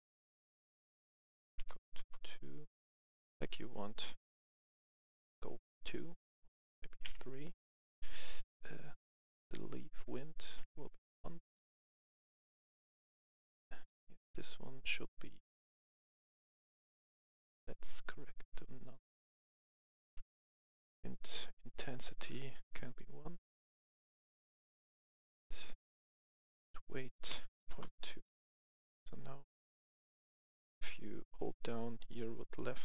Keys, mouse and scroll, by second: 0.9 click, 1.2 Right, 1.4 BackSpace, 1.6 KP_2, 1.9 Return, 2.6 click, 6.6 BackSpace, 7.0 KP_3, 8.4 click, 10.9 KP_1, 12.0 click, 16.0 click, 18.5 right click, 19.4 click, 19.7 right click, 20.5 F11, 20.6 F10, 21.2 click, 22.5 click, 22.8 click, 27.6 2, 27.8 Return, 28.7-31.6 drag, 31.7-32.8 drag.